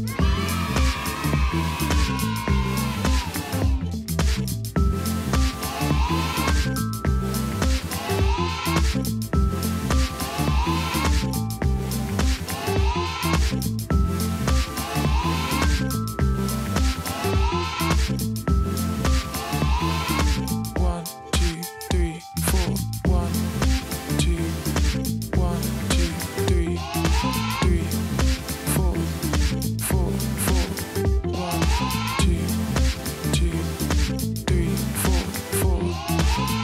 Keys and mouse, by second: 1.0 click, 5.0 click, 6.9 click, 10.6 click, 13.0 alt+BackSpace, 14.2 ctrl+d, 16.0 click, 18.2 click, 23.1 alt+BackSpace, 24.1 ctrl+d, 25.2 Up, 26.9 Right, 28.0 Right, 28.1 space, 28.8 click, 29.8 shift+click, 30.1 ctrl+g, 31.1 click, 31.6-34.0 typing, 34.7 click.